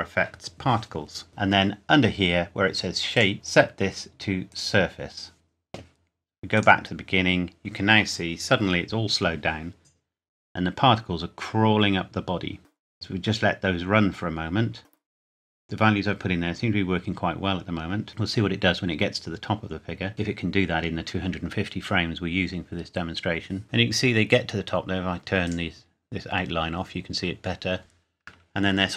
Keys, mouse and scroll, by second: 1.3-1.6 scroll up 1, 3.1 click, 25.5 click.